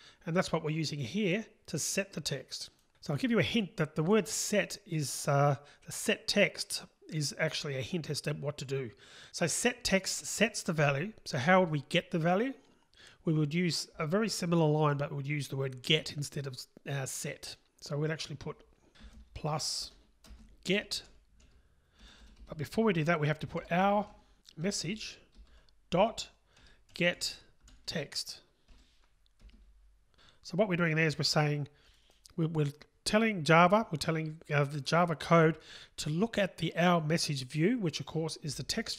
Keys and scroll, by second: 25.4 Return.